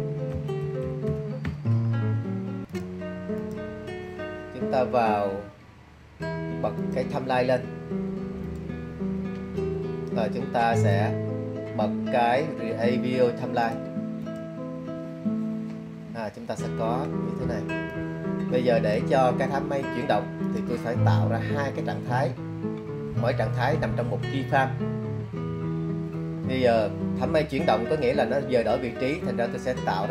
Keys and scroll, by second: 0.2-2.1 typing.